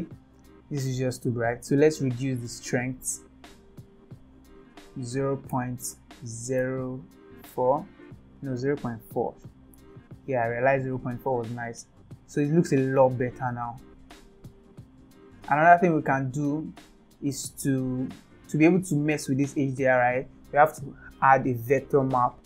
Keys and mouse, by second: 4.1-10.6 drag, 8.7 BackSpace, 12.5 shift+middle click, 16.1 click.